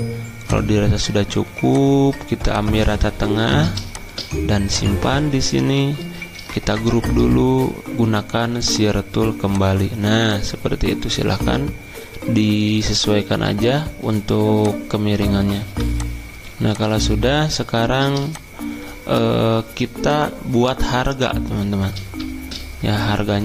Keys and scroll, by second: 6.7 ctrl+g, 15.6 v, 22.2 t.